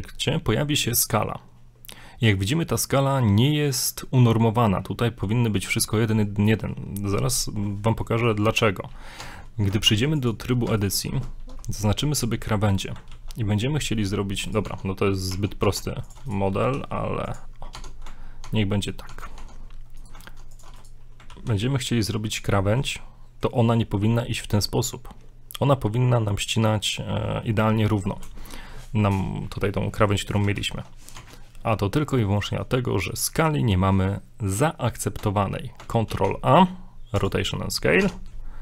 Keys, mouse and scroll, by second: 7.9 shift+middle click, 8.5 scroll up 1, 9.2 Tab, 10.8 ctrl+alt+right click, 11.6 middle click, 12.5-13.0 middle drag, 13.2 ctrl+b, 14.7 Tab, 15.8 ctrl+Tab, 16.3 right click, 16.5 scroll down 1, 16.7 e, 17.8 Tab, 18.5 ctrl+Tab, 19.1 ctrl+Tab, 20.0 right click, 20.3 ctrl+Tab, 20.8 right click, 21.3 ctrl+b, 22.6 shift+middle click, 30.6 ctrl+z, 31.5 Tab, 36.1 ctrl+a, 38.0 Tab.